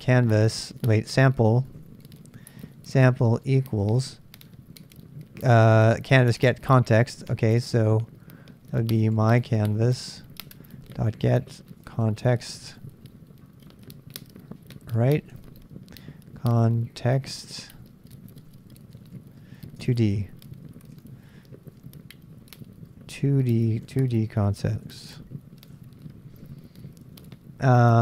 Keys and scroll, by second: 0.0-4.5 typing, 5.9-6.7 typing, 8.7-13.2 typing, 15.1-20.0 typing, 21.0 super+Tab, 21.9-24.8 typing, 26.0 Right, 26.3-27.7 typing.